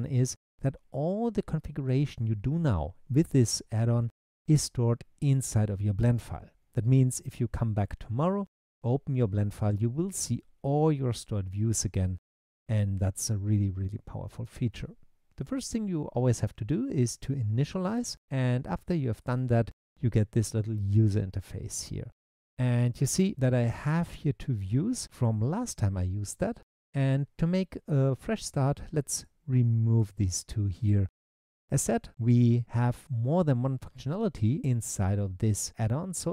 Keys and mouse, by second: 29.1 click, 30.0 click.